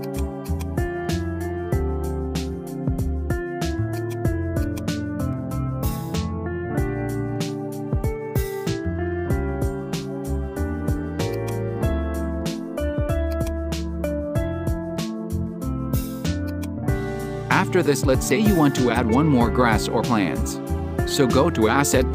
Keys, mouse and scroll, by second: 0.0-2.1 drag, 2.1-4.0 middle drag, 4.0 click, 4.8-7.3 drag, 7.6-10.2 drag, 11.4-13.5 drag, 16.5 click, 18.3 click, 19.2 right click, 22.0 click.